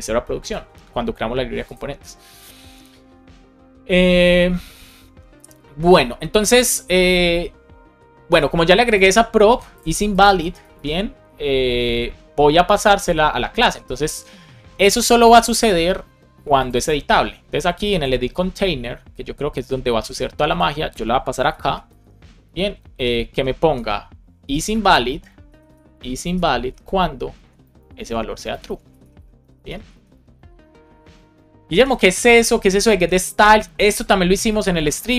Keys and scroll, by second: 10.7 super+c, 21.8 space, 21.9 shift+[, 22.3 space, 23.7 space, 26.7 Right, 26.9 Down, 27.3 Up, 27.7 super+Right, 28.1 Left, 28.9-30.0 typing, 30.4 super+v, 31.7 alt+shift+f, 32.1 super+s, 32.9 super+Left.